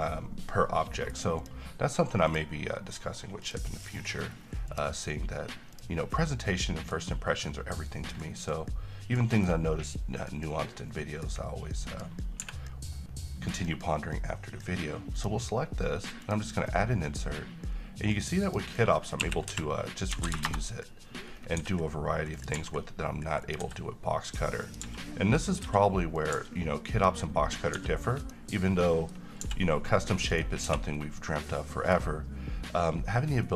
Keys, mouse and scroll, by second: 0.9-1.8 middle click, 1.6 click, 6.2-7.2 middle click, 7.4-7.9 scroll up 1, 7.9-8.5 middle click, 9.0 scroll down 1, 9.3 middle click, 12.0 click, 12.6 h, 13.0-13.6 middle drag, 15.3 click, 20.3 r, 21.5 scroll up 1, 21.7 s, 22.5 click, 22.7 g, 23.5 click, 23.7 s, 24.8 click, 24.9 g, 25.6 click, 25.8 s, 26.3 click, 26.5 g, 27.1 click, 27.9 s, 28.3 click, 28.7-29.3 middle click, 29.5 g, 30.0-30.4 scroll down 1, 30.4 right click, 30.8 h, 31.1 scroll down 1, 31.3-32.2 middle drag.